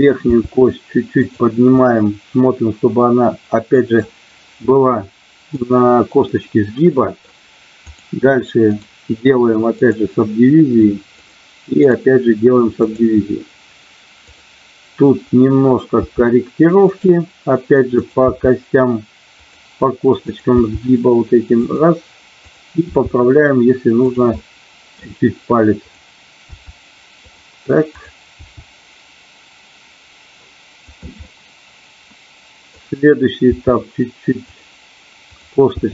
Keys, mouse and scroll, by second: 0.3 g, 1.1 click, 1.8-4.0 middle drag, 4.9 middle click, 6.3-7.3 middle drag, 7.8 click, 8.6-9.9 right drag, 11.1 click, 12.1 right click, 16.0 g, 16.8 click, 18.3 g, 19.4 click, 20.5 g, 21.5 click, 22.4 click, 22.9 g, 24.1 click, 24.4 middle click, 25.8 click, 26.4 g, 27.1 click, 28.3 g, 30.9 click, 31.3-32.8 middle drag, 33.5 g, 35.3 click, 35.8 g.